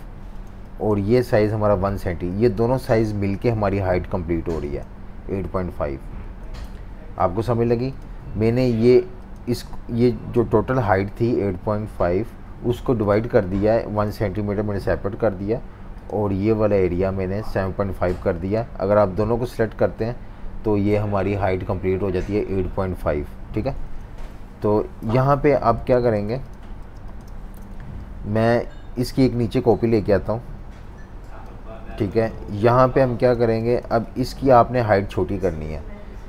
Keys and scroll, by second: 6.4 F18, 20.9 F19, 23.6 super+-, 23.9 super+-, 25.0 super+-, 25.7-27.0 typing, 27.6 super+-, 32.1 typing, 33.4 typing.